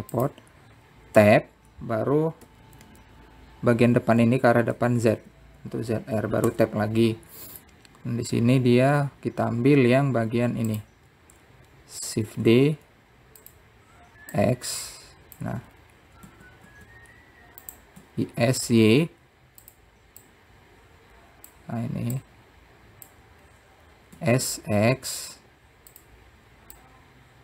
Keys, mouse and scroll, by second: 0.4 shift+d, 2.9 Tab, 4.2 Left, 4.6 Left, 6.8 shift+z, 8.3 Tab, 10.6-12.0 scroll down 6, 12.5 click, 14.1 shift+d, 16.2-17.2 drag, 17.4-17.8 scroll up 4, 18.0 s, 19.8 s, 22.0-23.3 drag, 24.0 click, 25.1-25.9 scroll up 1, 25.9 s.